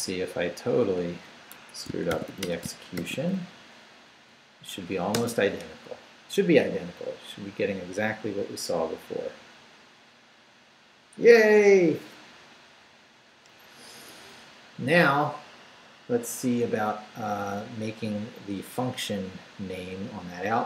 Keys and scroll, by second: 0.5 Up, 1.0 Down, 1.5 Escape, 1.9-3.0 typing, 3.5 shift+Up, 4.2 Up, 5.1 Return.